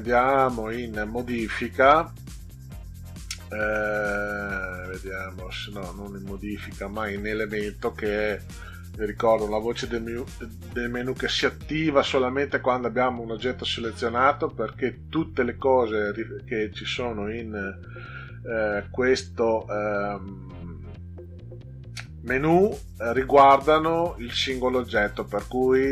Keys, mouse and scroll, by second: 16.1-16.7 drag.